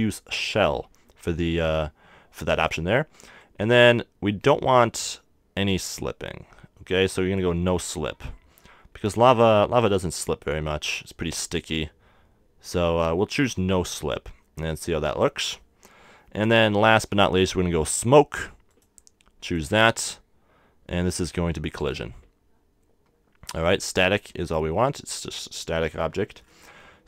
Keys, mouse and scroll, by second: 3.4-5.2 drag, 18.7-21.2 drag, 22.7-26.3 drag, 26.6-27.0 middle drag.